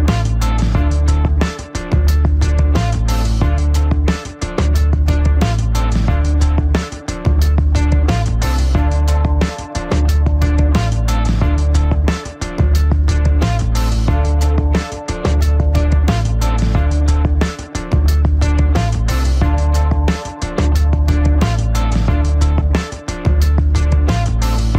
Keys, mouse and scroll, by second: 0.0-0.1 typing, 0.5 ctrl+=, 1.5 space, 1.7 click, 1.8 space, 3.0 typing, 3.7 click, 8.4 click, 9.2-9.7 typing, 10.8-12.5 alt+drag, 12.8 alt+click, 12.9 ctrl+-, 13.6-14.8 typing, 14.0 click, 14.7 click, 17.3 ctrl+=, 18.3-20.8 drag.